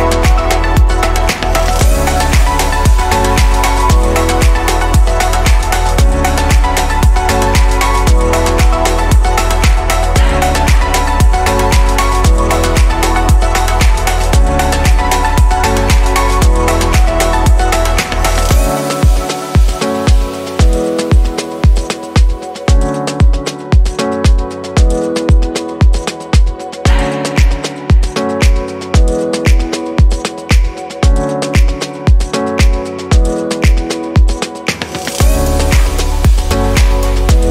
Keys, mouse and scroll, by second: 0.0-2.8 middle drag, 2.8 click, 5.5-9.3 middle drag, 9.3 Delete, 11.3 click, 12.6 click, 13.2-15.0 middle drag, 15.0 click, 16.0-16.6 shift+middle drag, 16.6 click, 17.4-18.7 scroll up 2, 18.7 click, 21.1 click, 21.7-24.4 middle drag, 24.4 click, 26.9 alt+shift+click, 28.5 /, 28.9-31.4 middle drag, 31.4 alt+shift+click, 33.3 alt+shift+click, 35.8 shift+click.